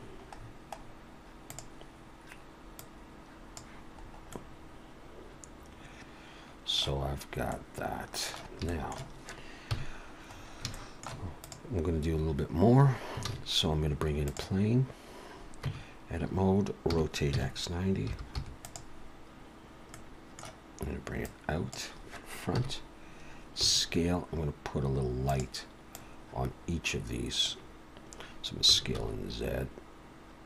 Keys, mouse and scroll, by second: 1.5 click, 1.5-3.9 scroll down 2, 3.9-4.5 scroll up 4, 4.3 middle click, 6.9-7.4 scroll up 3, 7.4 middle click, 8.7 shift+middle click, 9.7 KP_1, 10.2-10.6 scroll up 3, 10.7 shift+middle click, 11.4 click, 12.1-12.5 scroll down 3, 13.2 shift+a, 15.6 Tab, 16.9 r, 19.9 middle click, 21.2 click, 22.6 KP_1, 23.6 s, 25.9 click, 28.6 s.